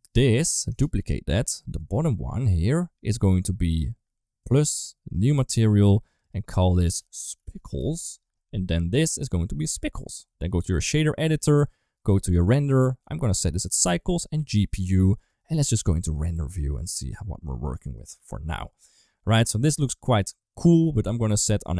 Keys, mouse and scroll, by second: 0.7 shift+d, 1.7 middle click, 4.2 click, 5.3 click, 5.9-7.8 drag, 8.9 click, 10.4-11.1 drag, 12.3 click, 12.8-13.5 drag, 14.0-14.4 drag, 15.2 middle click, 15.7 middle click, 16.9 click, 17.6 middle click, 18.5 ctrl+s, 18.5 middle click.